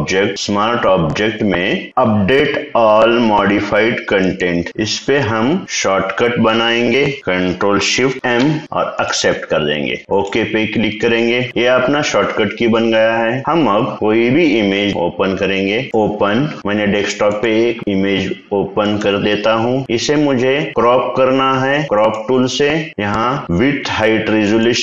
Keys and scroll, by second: 8.6 ctrl+shift+m.